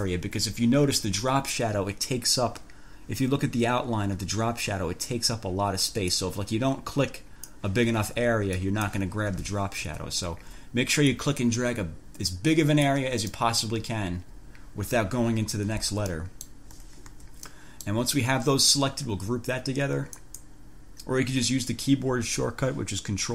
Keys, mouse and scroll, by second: 1.0-1.3 ctrl+scroll up 2, 6.4-8.0 drag, 8.8 click, 10.1 ctrl+z, 10.5 ctrl+scroll down 2, 11.4-13.3 drag, 13.6 click, 14.0-14.6 ctrl+scroll down 2, 16.4 click, 17.3 1, 17.7 click, 20.4 click.